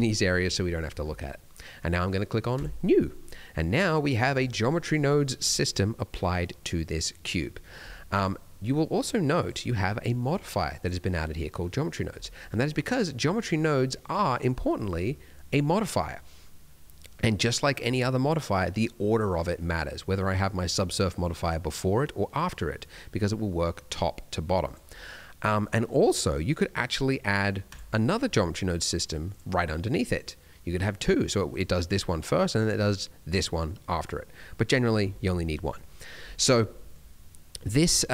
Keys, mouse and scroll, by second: 2.5 click, 3.0-3.3 scroll down 2, 3.3 middle click, 8.6 click, 17.6 click, 21.7 click, 24.6 click, 26.0 click, 29.3 click, 31.5 click, 32.3 click, 33.9 click, 36.6 middle click, 37.4 middle click.